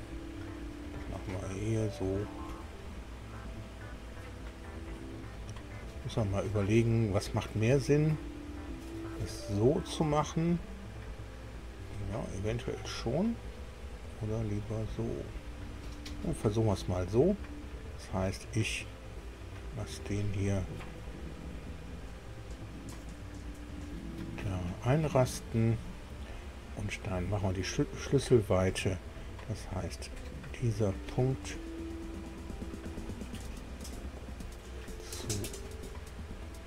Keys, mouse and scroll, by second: 1.2 click, 24.3 click, 25.8 click, 30.0 click.